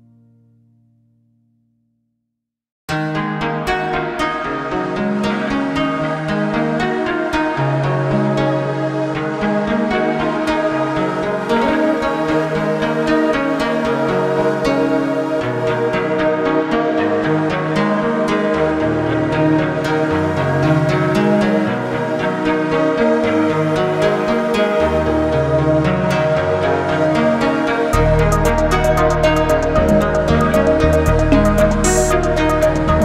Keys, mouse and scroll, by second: 0.4 shift+click, 1.1 shift+click, 3.9 ctrl+KP_Add, 5.0-6.2 middle drag, 6.2-6.8 scroll down 6, 7.4 click, 8.3-13.5 drag, 15.2-17.4 drag, 17.4 scroll down 4, 18.2 click, 21.7-23.5 drag, 23.5 scroll up 4, 24.2-26.1 middle drag, 26.1 click, 27.4 g, 29.5 Escape, 31.0 click, 32.1 g.